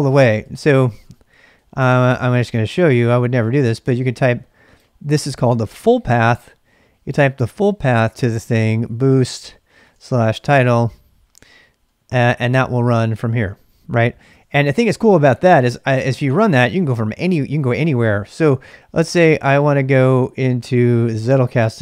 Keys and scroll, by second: 0.4 ctrl+c, 0.5-1.4 typing, 7.6-10.5 typing, 11.8 typing, 12.1 Return, 14.1-14.9 typing, 16.3-18.1 typing, 19.4 typing, 20.5-21.6 typing, 21.7 Return.